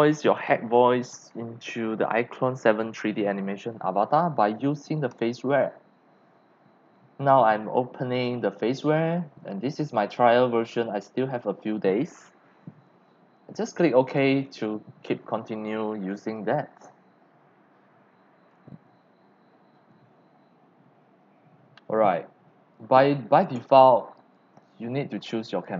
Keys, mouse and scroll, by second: 5.1 click, 5.8 click, 9.5 click, 14.0 click, 21.8 click, 22.7-23.4 drag, 24.2 click, 25.5 click.